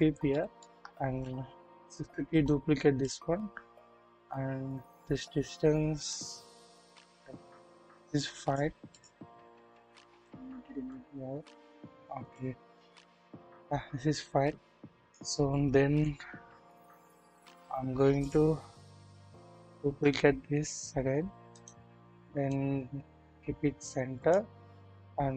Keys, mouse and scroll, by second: 0.3-0.7 shift+middle drag, 1.7 shift+d, 3.1-8.6 right drag, 9.7 click, 10.9 click, 11.2 click, 13.3-15.2 drag, 15.9 KP_1, 16.9 KP_3, 17.6 scroll up 1, 18.4 typing, 19.5-19.8 typing, 21.9 right click, 22.5 click.